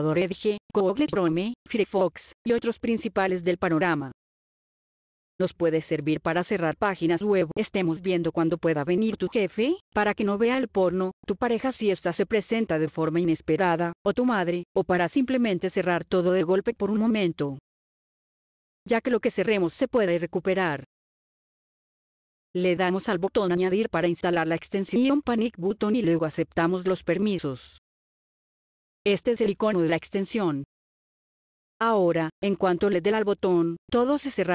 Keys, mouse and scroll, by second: 7.0-7.5 scroll down 5, 8.2-8.9 scroll down 9, 9.4-10.0 scroll up 12, 10.7 scroll up 1, 11.3 scroll down 1, 11.9 click, 12.5-12.9 scroll down 7, 14.7 click, 15.8 click, 17.7 click, 18.4-19.7 scroll up 10, 23.4 click, 28.6 click.